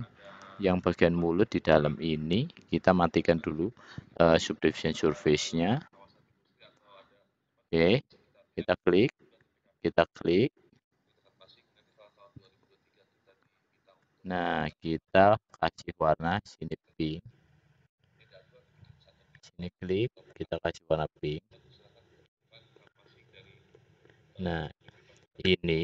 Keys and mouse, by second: 3.5 middle click, 4.8-7.6 middle drag, 16.9 click, 17.0-17.7 drag, 19.6-21.0 shift+drag, 21.2 click.